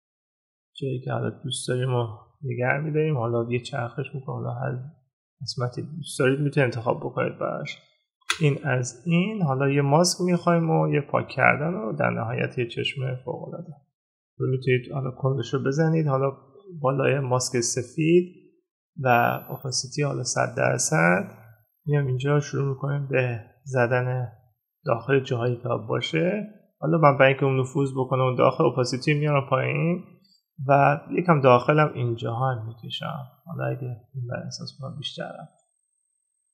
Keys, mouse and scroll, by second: 11.6 ctrl+-.